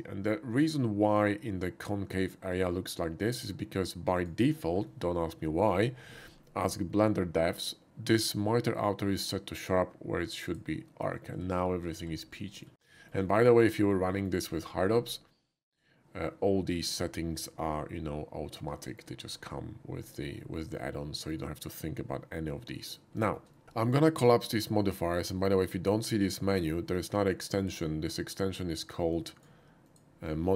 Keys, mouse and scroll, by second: 4.2 click, 4.7-5.5 middle drag, 10.4 click, 11.3 middle click, 11.5 middle click, 11.8 middle click, 12.4 middle drag, 13.0 shift+middle click, 13.3 shift+middle click, 14.1 shift+middle drag, 18.8 middle click, 20.8-21.3 shift+middle drag, 22.7 middle drag, 23.3 shift+middle click, 23.5 shift+middle click, 27.6 click, 28.3 click, 29.1 click, 29.8 click.